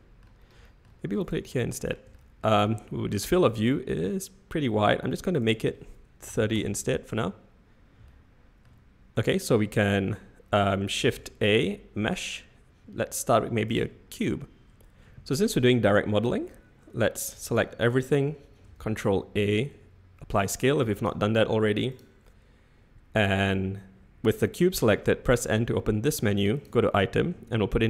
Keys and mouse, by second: 0.6 shift+middle click, 1.2 shift+right click, 1.5-1.9 middle drag, 2.1 shift+middle click, 2.6-3.4 middle drag, 4.6 n, 5.4-7.3 drag, 8.1-8.6 shift+middle drag, 11.0 shift+a, 17.3 a, 18.7 ctrl+a, 20.9 click, 26.5 click.